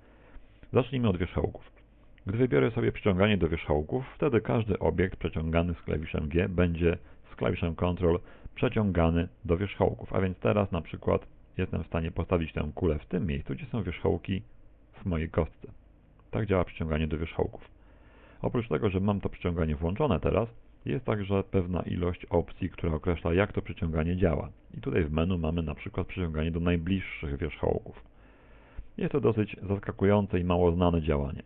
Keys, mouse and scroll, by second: 7.1 g, 24.7 click, 30.4 middle click, 31.2 middle click.